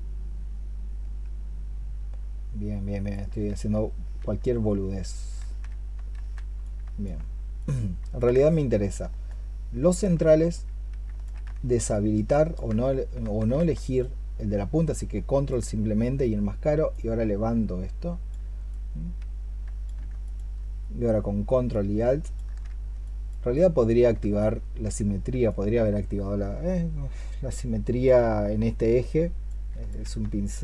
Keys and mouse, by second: 3.3 ctrl+z, 3.9 ctrl+z, 5.2 ctrl+z, 6.0 ctrl+z, 8.3 ctrl+click, 9.1 ctrl+alt+click, 11.7 ctrl+alt+click, 13.2 ctrl+z, 13.8 ctrl+click, 20.1 ctrl+click, 21.5 ctrl+alt+click, 22.9 alt+click.